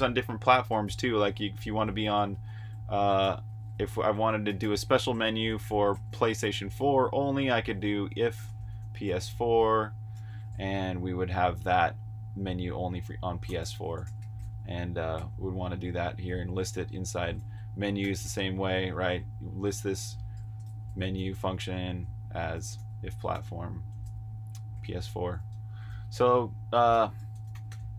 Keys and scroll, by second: 0.7-3.4 typing, 2.2 Escape, 12.7-14.8 typing, 15.1 super+j, 16.2-23.1 typing, 25.9 typing.